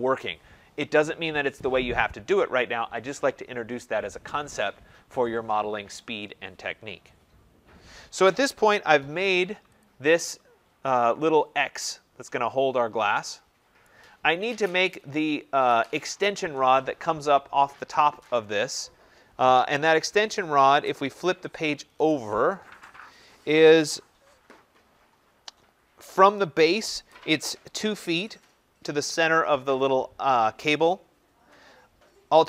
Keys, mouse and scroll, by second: 9.7 click, 11.3 middle click, 11.4 middle click, 13.7 right click, 14.5-16.4 scroll.